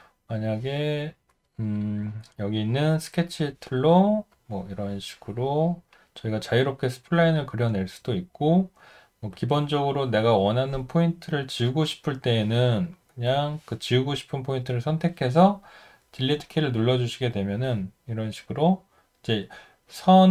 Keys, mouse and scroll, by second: 16.2 Delete, 19.0 Delete.